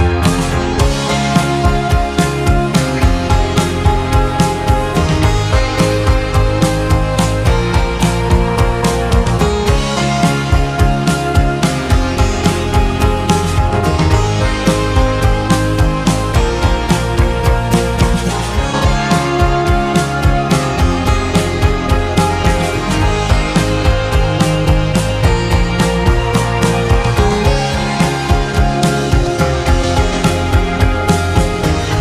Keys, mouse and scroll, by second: 0.0 Tab, 0.6-1.2 middle drag, 1.2-1.7 scroll down 2, 1.7 scroll up 1, 1.8-4.4 middle drag, 4.7-5.3 drag, 8.1-9.3 scroll down 2, 9.3 ctrl+a, 10.0 ctrl+a, 10.6 click, 11.1 ctrl+a, 12.0-12.9 scroll down 5, 12.9-14.1 shift+middle drag, 14.1-14.8 scroll down 1, 14.8-16.0 scroll up 1, 16.0 a, 17.6 ctrl+a, 18.3 ctrl+a, 20.9 click, 21.8-23.4 middle drag, 23.4-23.8 scroll down 2, 23.8-26.1 scroll up 2, 26.2 scroll up 1, 26.4-27.3 middle drag, 27.3-29.8 scroll down 1.